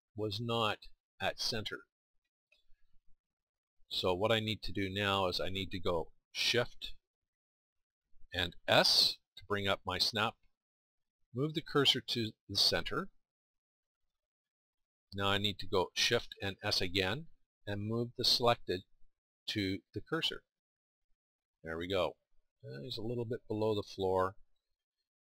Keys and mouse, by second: 8.7 shift+s, 16.9 shift+s.